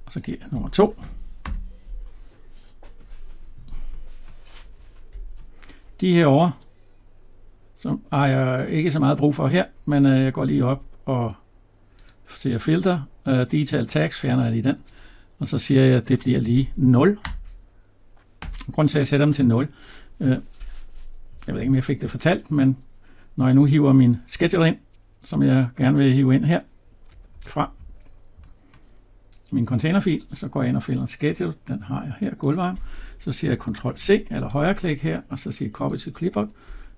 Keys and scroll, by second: 1.2 Return, 18.2 Return, 33.6 ctrl+c.